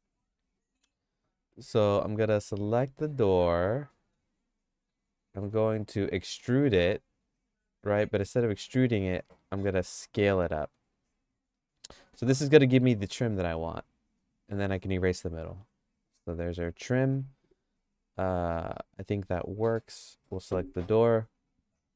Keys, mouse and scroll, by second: 0.0 click, 0.0 3, 0.6 click, 1.4 Tab, 1.9 Tab, 3.0 click, 3.4 click, 6.3 e, 8.7 s, 13.6-16.8 shift+middle drag, 19.7 click, 20.8 x.